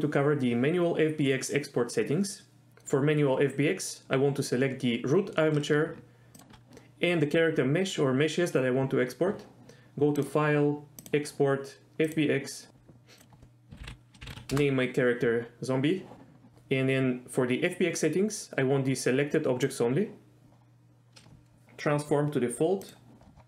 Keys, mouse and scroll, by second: 10.4-12.5 drag.